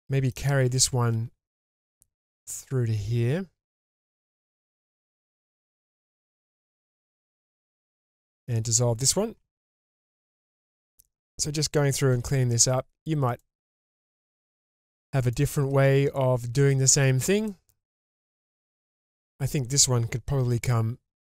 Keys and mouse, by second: 1.1 k, 5.8-6.4 middle drag, 10.1 ctrl+x, 10.5-11.3 middle drag, 12.1 k, 16.7 middle click, 18.1-19.7 middle drag, 20.4 k.